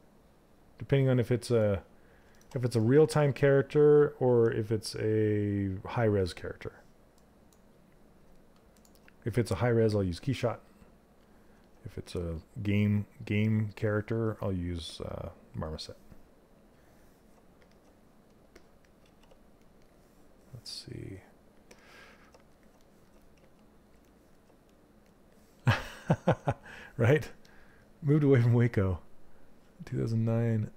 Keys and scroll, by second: 22.9 s.